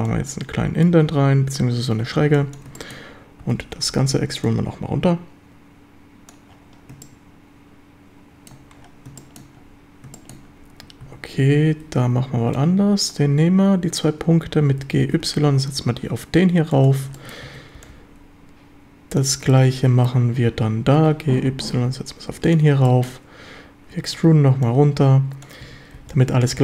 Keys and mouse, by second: 0.1 click, 1.1 a, 2.2 b, 2.8 shift+click, 3.4 e, 3.9 Escape, 4.5-6.3 drag, 7.0-8.5 shift+middle drag, 9.2 shift+middle drag, 10.2 shift+drag, 11.0 a, 11.4 b, 14.7 g, 15.1 y, 16.8 ctrl+click, 17.2 shift+middle click, 17.5 a, 17.8 b, 19.5-20.1 shift+middle drag, 21.0 g, 21.4 y, 22.5 ctrl+click, 22.9 shift+middle click, 23.9 e, 24.2 Escape, 24.6 click, 25.6 a, 26.0 b.